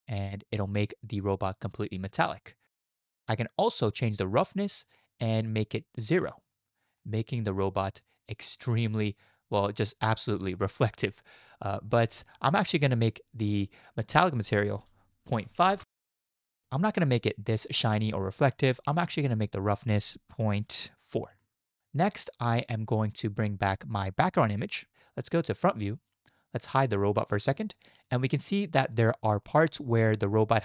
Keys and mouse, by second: 0.2-3.0 middle drag, 4.8-6.5 middle drag, 7.0-7.8 middle drag, 8.9-9.2 shift+drag, 10.6 shift+drag, 10.9-11.3 middle drag, 11.9 middle drag, 14.1-15.8 drag, 17.0-18.5 middle drag, 19.7-21.4 drag, 24.5 click, 27.4 click, 28.2 shift+drag, 29.1-29.4 shift+drag.